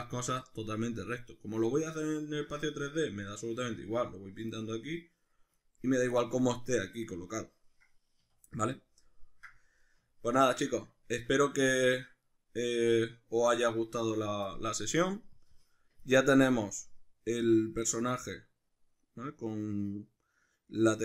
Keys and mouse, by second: 1.7-15.4 middle drag, 8.2 a, 11.9 Tab, 15.4 click, 16.3-21.0 ctrl+middle drag.